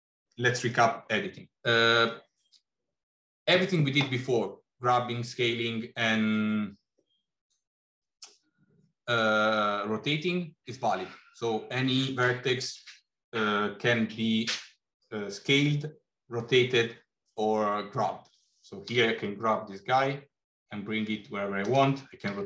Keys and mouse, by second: 18.8 g, 22.0 r.